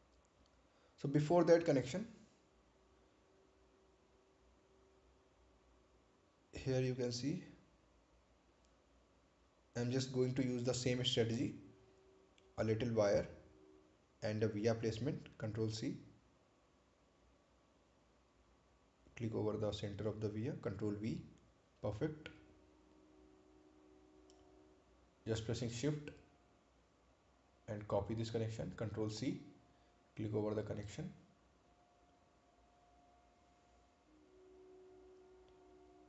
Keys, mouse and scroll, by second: 8.6 scroll up 1, 13.8 click, 14.5 right click, 17.0 click, 19.0 ctrl+c, 20.5 click, 21.7 ctrl+v, 22.7 click, 30.9 ctrl+c, 32.1 click.